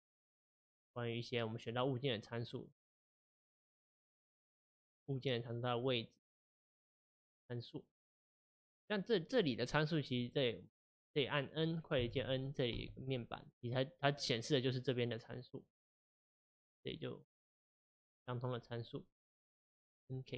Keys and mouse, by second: 0.1 click, 1.7 click, 6.3 click, 10.2 click, 12.0 n, 19.8 middle click.